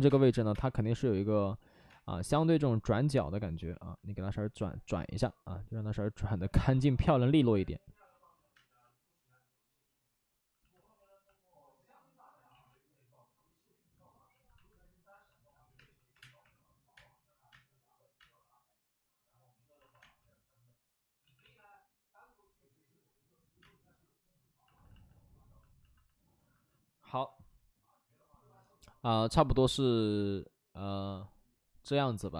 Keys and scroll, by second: 0.0-0.6 typing, 1.5 ctrl+z, 1.8 space, 6.6 space, 8.5 space, 12.4 ctrl+z, 12.4 space, 15.7-19.9 typing, 19.7 alt+s, 21.2 ctrl+z, 21.3 ctrl+z, 23.5 space, 24.6 alt+s.